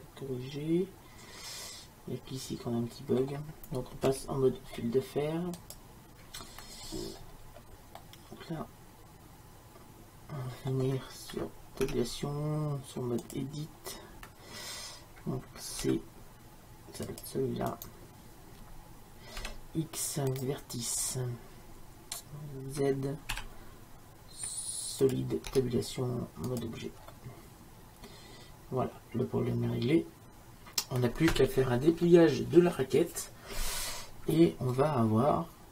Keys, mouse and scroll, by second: 0.3 middle click, 4.2 z, 6.9-10.0 middle drag, 11.9 Tab, 15.9 c, 19.6 x, 21.1 middle click, 23.4 z, 25.6 Tab, 27.4-29.1 scroll up 1, 33.7-35.7 middle drag.